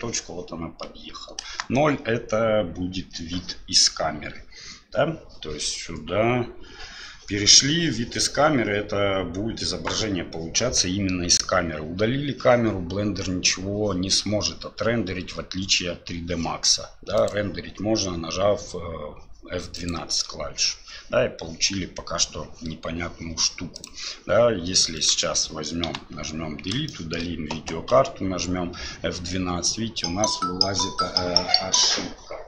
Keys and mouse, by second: 1.4 KP_0, 17.2-23.9 drag, 24.9 right click, 25.8 Delete, 26.9 shift+click, 27.9 F12.